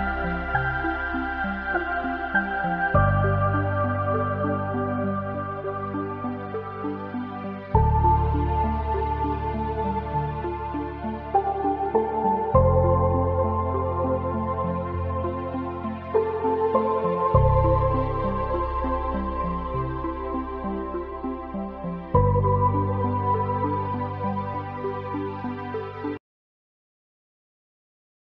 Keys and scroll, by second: 12.6 ctrl+z.